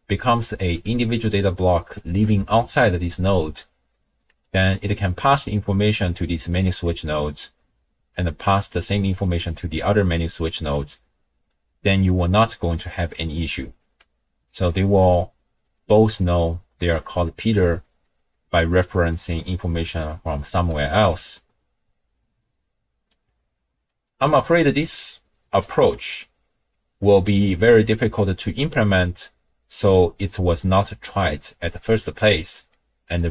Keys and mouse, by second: 0.7 d, 1.1 click, 2.0 d, 2.8 d, 4.3-5.5 d, 5.5-6.6 drag, 6.6 d, 6.7 d, 6.8-10.4 d, 8.2-9.3 drag, 9.5 click, 10.8 d, 14.0-20.8 typing, 14.5 click, 15.0 click, 16.2 click, 17.2 click, 17.8 click, 18.3 click, 19.4 click, 32.9-33.3 drag.